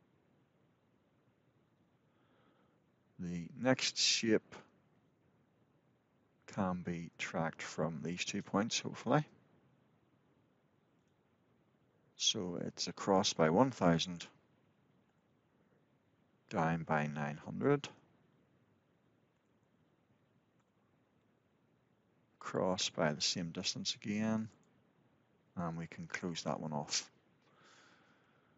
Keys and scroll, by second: 14.8 Return, 20.3 Return, 26.0 Return.